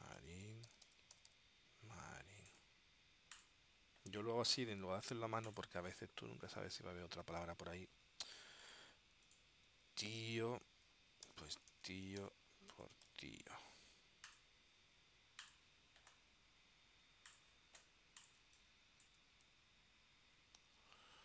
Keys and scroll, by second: 0.0-1.9 typing, 10.2 super+f, 11.1-13.3 typing, 18.5 space, 20.9 super+s.